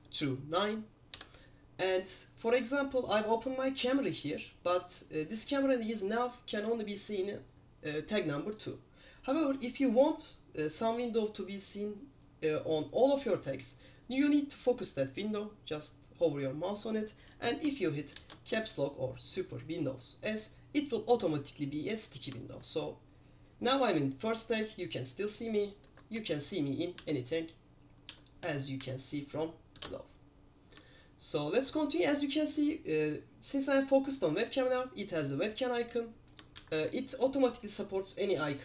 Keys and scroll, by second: 0.0 super+1, 1.3 super+2, 18.3 super+s, 22.7 super+1, 26.0 super+3, 26.3 super+4, 27.1 super+5, 28.2 super+6, 28.5 super+7, 28.9 super+8, 36.7 super+9.